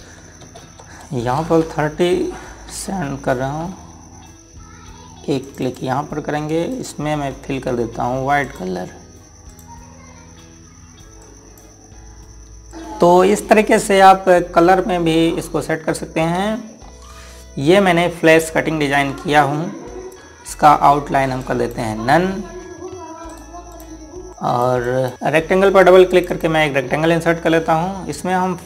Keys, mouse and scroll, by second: 0.4 KP_0, 1.2 Tab, 2.2 KP_3, 3.5 KP_Enter, 6.2 click, 17.6-19.0 scroll down 1, 20.9 click, 24.1 right click, 24.3 click, 27.6 scroll down 1, 28.3 scroll up 1.